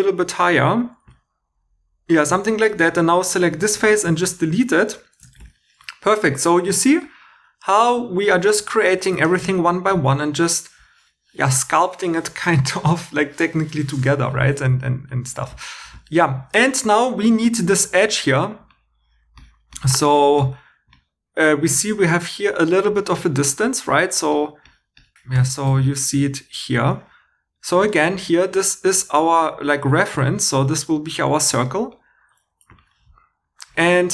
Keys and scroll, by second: 2.3 3, 3.7 shift+x, 5.4 shift+e, 28.5 2.